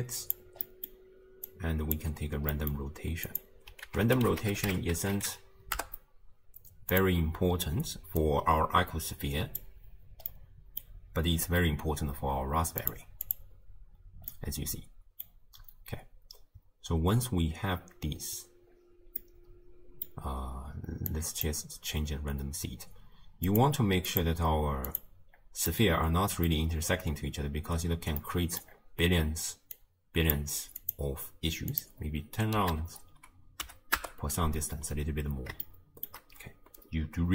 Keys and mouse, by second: 0.7 click, 1.6 click, 2.7 click, 3.9 ctrl+a, 8.2 click, 8.5-9.8 drag, 10.5 click, 12.9 click, 13.3 click, 14.5-15.3 drag, 19.4 click, 21.1 click, 23.5 click, 24.1 click, 24.9 click, 25.7-26.5 middle drag, 28.3 middle click, 29.8 click, 30.8-34.1 drag, 35.7 shift+click.